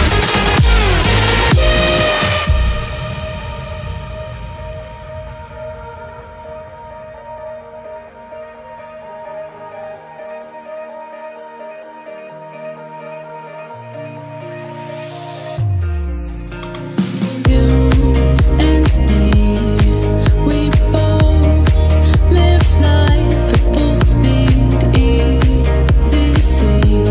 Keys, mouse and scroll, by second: 0.2 right click, 0.9 ctrl+scroll down 1, 1.4 ctrl+a, 1.8 click, 2.4 ctrl+a, 2.6 right click, 3.5 click, 5.1-5.5 scroll down 1, 5.5 click, 6.9 ctrl+a, 7.1 right click, 8.3 click, 10.5 middle click, 11.1 click, 11.4-12.1 scroll up 1, 12.1 m, 13.1 Left, 13.6 click, 13.7 space, 14.4-16.1 shift+middle drag, 16.1 scroll up 1, 17.4 scroll down 1, 19.3 m, 20.1 click, 21.3 Left, 21.4 scroll down 1, 23.4-25.0 middle drag, 25.0 click, 25.1 space, 25.4 click, 25.8 scroll up 1, 26.1 shift+middle click, 26.4-27.1 scroll up 1.